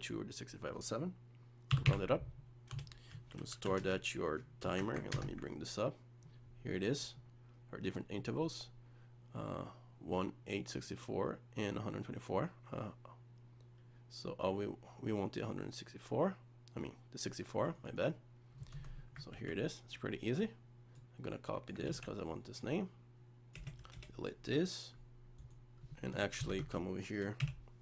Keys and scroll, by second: 5.1 ctrl+space, 19.4 ctrl+s, 21.9 ctrl+x.